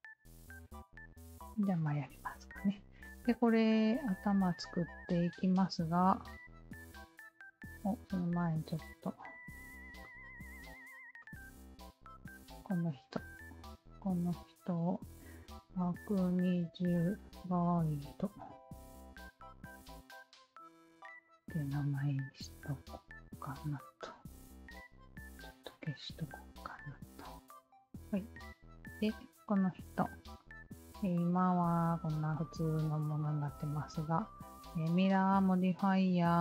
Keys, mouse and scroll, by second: 0.3-2.6 alt+drag, 3.0-3.9 alt+drag, 6.4-7.1 alt+drag, 8.0 alt+click, 10.1 ctrl+z, 11.2 click, 11.4 ctrl+z, 12.8 click, 14.3 click, 14.5 click, 15.5-17.6 typing, 19.4 shift+i, 20.4 shift+d, 20.7 shift+e, 21.0 Return, 23.0-23.7 drag, 25.2 click, 26.4-27.0 alt+drag, 27.2 alt+middle drag, 27.6-28.3 alt+drag, 28.7 alt+click, 29.6 Tab, 30.2-32.8 alt+drag, 33.1 Tab, 33.6-34.0 alt+drag, 36.3-36.4 alt+drag.